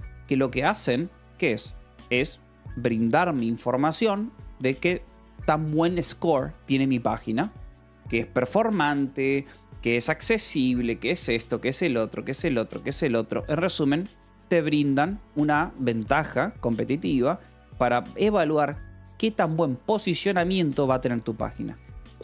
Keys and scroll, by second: 0.0-1.4 typing, 0.0 Escape, 4.9 Escape, 14.2 j, 14.7 k, 15.9 Escape, 16.8 k, 17.6 j, 21.5 Escape.